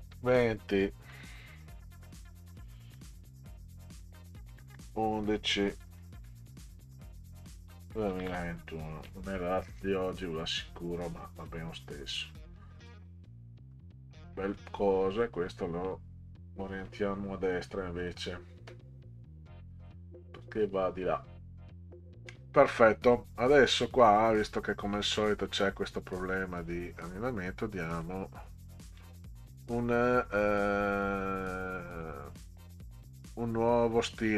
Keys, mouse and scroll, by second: 0.1 ', 2.9 shift+8, 4.5 1, 4.7 1, 6.1-8.8 typing, 12.8 click, 13.6 Return, 15.1 click, 18.0 click, 19.8 click, 22.7 scroll up 2, 25.9 scroll up 2, 27.9 click, 29.0 click, 31.9 click.